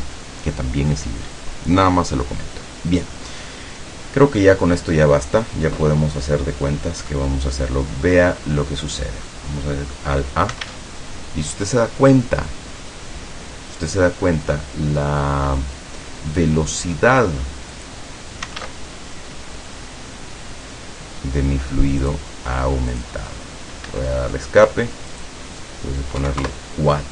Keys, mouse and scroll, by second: 4.5-5.7 middle drag, 6.8-7.1 scroll down 2, 7.3-8.4 middle drag, 9.1 scroll down 2, 9.4-10.3 middle drag, 10.8 alt+a, 16.9 click, 17.8 click, 18.7 alt+a, 22.1 click, 23.0 click, 24.0 Escape, 25.2 click, 26.3 KP_4, 26.5 KP_Enter.